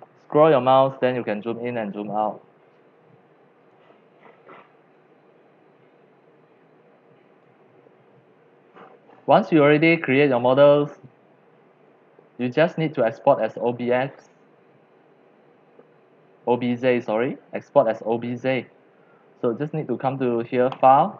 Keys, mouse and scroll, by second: 3.7-5.3 right drag, 7.4 click, 9.8 scroll, 9.9 middle click, 11.0 middle click, 11.9 scroll, 12.4 click, 14.6 click, 20.7-21.1 drag.